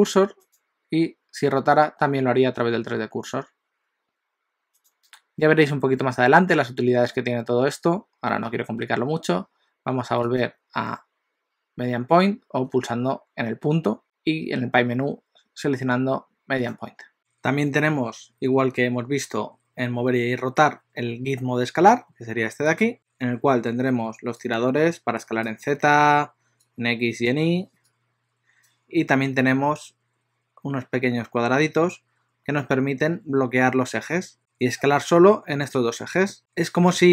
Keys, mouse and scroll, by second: 1.7 r, 10.3 click, 22.7 click, 24.7 click, 26.9 click, 27.9 click, 31.7 scroll up 2, 34.2 click, 34.2 scroll up 1, 34.4 click, 35.0 click.